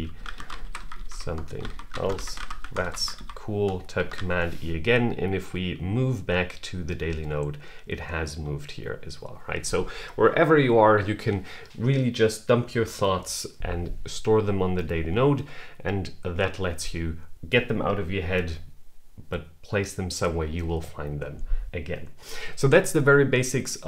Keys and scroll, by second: 3.8 super+e.